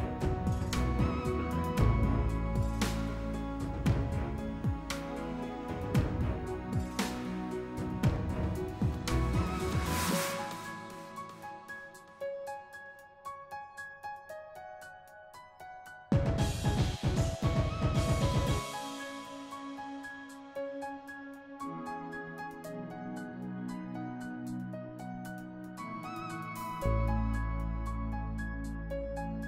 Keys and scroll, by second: 1.8 s, 5.3 s, 7.3 s, 11.3 s, 15.2 s, 22.5 f, 22.8 s.